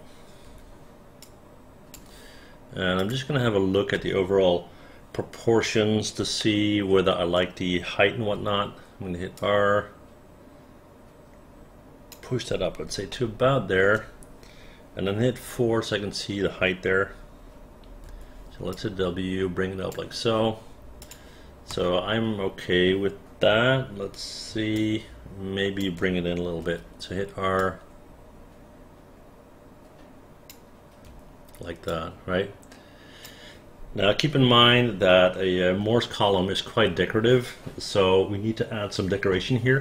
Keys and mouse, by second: 0.6 w, 3.1 click, 4.0 space, 6.5 alt+middle click, 8.5 r, 9.5-12.2 drag, 13.2 alt+middle click, 15.5 4, 18.1 w, 18.8-20.0 drag, 21.1 click, 21.8 space, 24.9-25.9 alt+drag, 26.7 r, 27.7-30.6 drag, 31.2 w.